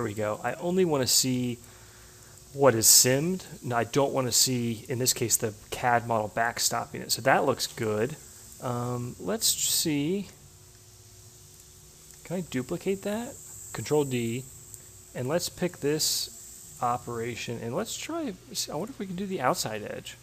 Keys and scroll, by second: 11.9 ctrl+d.